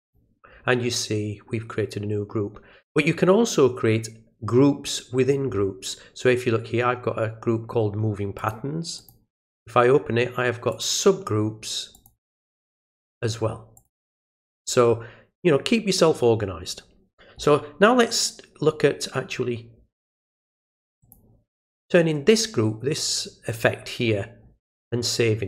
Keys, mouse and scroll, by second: 0.0 click, 8.4 click, 9.0 click, 10.7 click, 11.9 click, 13.0 click, 13.8 click, 21.0 click.